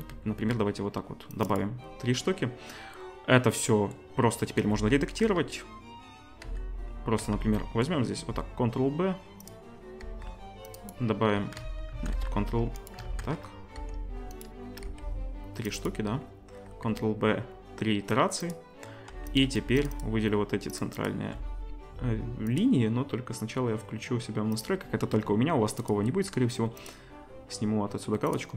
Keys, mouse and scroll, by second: 1.6-5.2 middle drag, 4.6 z, 5.2 z, 6.4 z, 6.8-8.2 middle drag, 7.2 z, 8.2 ctrl+b, 10.0 ctrl+r, 11.6 ctrl+z, 12.0 ctrl+z, 12.4 ctrl+r, 12.8-24.7 ctrl+middle drag, 13.1 ctrl+z, 13.8 ctrl+r, 14.9 ctrl+r, 16.7 ctrl+b, 19.1 2, 22.5-28.5 drag, 25.0-25.8 middle drag.